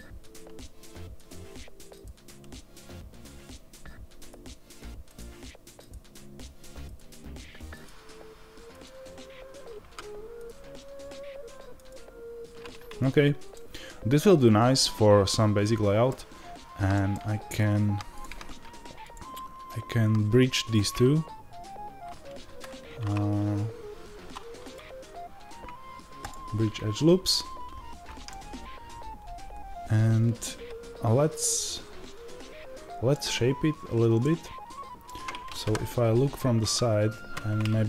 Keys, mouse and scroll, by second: 9.7 ctrl+z, 10.3-13.4 ctrl+right drag, 13.4-17.4 middle drag, 17.4 shift+right click, 18.0 click, 20.6-28.2 right drag, 28.2-37.8 middle drag, 35.5 KP_1.